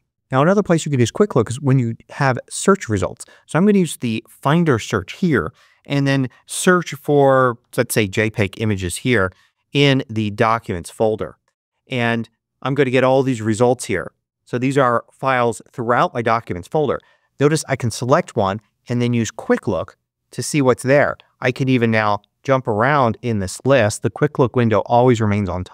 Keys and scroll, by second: 6.7-8.0 typing, 18.9 space.